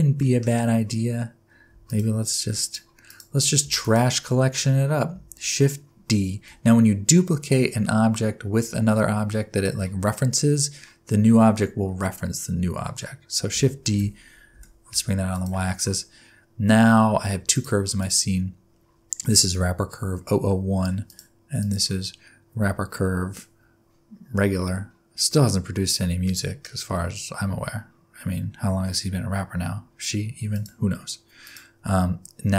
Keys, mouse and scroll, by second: 1.8 shift+click, 2.6 click, 3.0 click, 3.8 shift+click, 13.8 shift+d, 17.5 click, 18.0 click, 21.0 click, 21.6 click, 25.3 middle click, 30.5 click, 31.4 click.